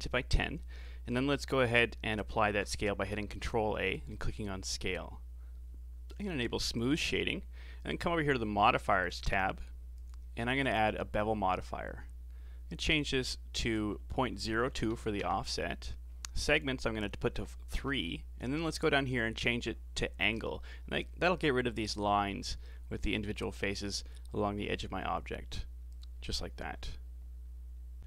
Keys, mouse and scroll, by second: 2.4 ctrl+a, 6.1 w, 9.1 click, 9.9-13.0 drag, 13.6-19.5 drag, 25.9 click.